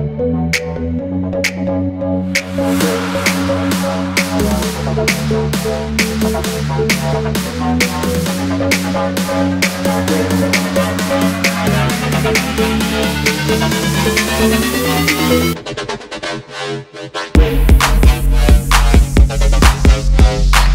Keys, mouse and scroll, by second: 0.0 shift+click, 0.7 alt+scroll up 1, 2.1 m, 2.7 alt+scroll down 1, 3.2 alt+scroll up 1, 3.7 alt+scroll up 1, 5.5 alt+scroll down 1, 6.1 alt+scroll down 1, 6.8 alt+scroll down 1, 7.0 v, 7.4 alt+scroll down 1, 7.7 ctrl+z, 8.2 alt+scroll up 1, 9.1 alt+scroll down 1, 9.9 shift+click, 10.8 shift+click, 11.5 m, 14.3 typing, 14.7 double click, 15.0 alt+scroll up 1, 16.4 alt+scroll up 1, 17.1 alt+scroll down 1, 17.3 alt+scroll up 1, 18.2 shift+click.